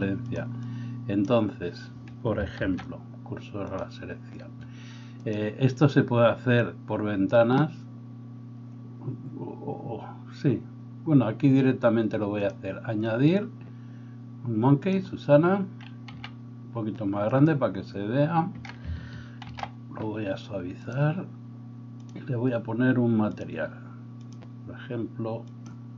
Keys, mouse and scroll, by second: 0.3 click, 0.5 middle click, 0.6-17.5 drag, 2.6 shift+s, 16.2 s, 17.5-20.9 middle drag, 19.5 ctrl+2, 20.9-23.4 drag, 23.4 middle click, 24.3-25.7 drag, 25.7-25.9 middle drag.